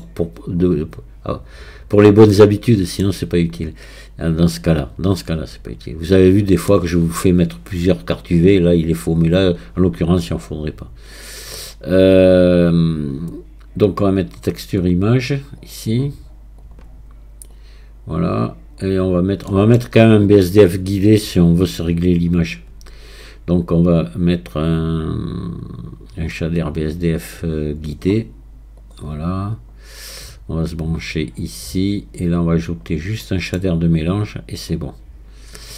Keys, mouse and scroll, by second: 0.6-2.3 drag, 2.3-4.6 middle drag, 4.6-7.6 drag, 11.1-14.1 drag, 17.5-19.1 drag, 19.1 scroll down 2, 19.5-22.2 middle drag, 22.2-25.2 drag, 30.8-32.8 drag, 32.8 scroll down 2, 33.2-34.6 middle drag, 34.6-35.7 drag.